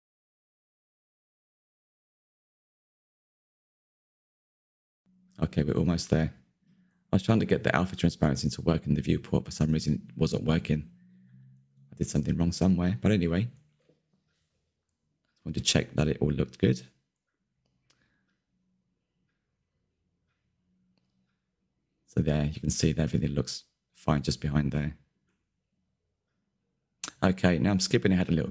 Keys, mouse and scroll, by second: 0.1 click, 0.4 KP_1, 0.7 shift+middle click, 1.0 scroll up 3, 1.2-1.6 shift+middle drag, 1.6 click, 2.2 click, 3.9 scroll down 1, 4.2 scroll up 1, 4.4-4.9 shift+middle drag, 4.9 z, 5.0 scroll down 1, 5.1-7.0 middle drag, 7.0 click, 7.4 click, 7.8 middle click, 7.9 scroll down 1, 8.2 click, 8.4 click, 9.2 click, 9.4 middle click, 10.2 click, 10.4 click, 10.8 ctrl+z, 11.8 click, 12.8 click, 13.3-14.7 middle drag, 14.7 click, 15.8 click, 16.0 middle click, 16.1-16.5 scroll up 4, 16.5 Tab, 16.7 Tab, 17.1 click, 17.9 click, 18.9 q, 19.2 middle drag, 19.5 click, 19.6-19.9 middle drag, 19.9-20.4 scroll down 1, 20.4 click, 20.7 click, 20.8 scroll down 3, 21.0-21.6 middle drag, 21.6 click, 22.1-22.4 shift+middle drag, 22.7 click, 22.9 middle click, 23.1-23.6 scroll up 3, 23.6 ctrl+z, 23.8 click, 23.9-24.5 scroll down 2, 24.3 click, 24.5-28.5 shift+middle drag.